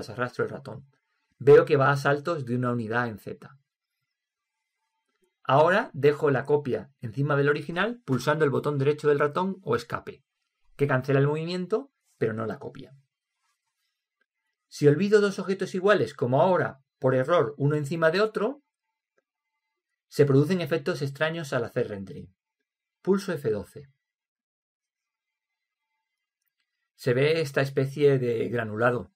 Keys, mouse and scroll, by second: 23.9 F12, 25.4 F12.